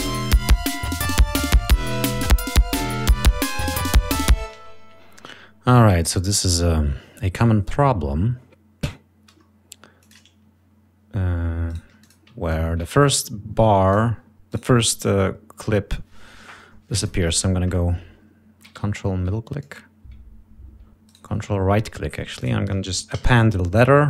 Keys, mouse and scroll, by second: 1.6 click, 4.5 space, 10.0 click, 11.7 shift+right click, 12.0 shift+click, 12.5-14.1 ctrl+shift+drag, 14.5 right click, 16.9 click, 17.6 ctrl+click, 18.7 ctrl+scroll up 2, 21.0 ctrl+right click, 22.4 click, 23.1 a.